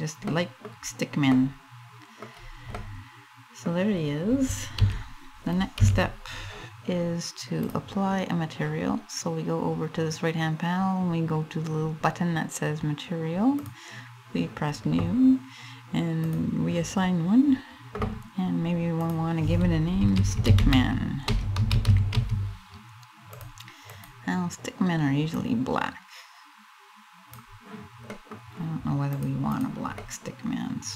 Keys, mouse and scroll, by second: 0.4 scroll up 2, 1.0 middle click, 1.9-2.2 scroll down 2, 2.4 middle click, 3.5 scroll down 1, 4.4 a, 5.4 a, 7.9 click, 13.3 click, 16.0 click, 23.5 click, 28.8 click, 29.6 middle click.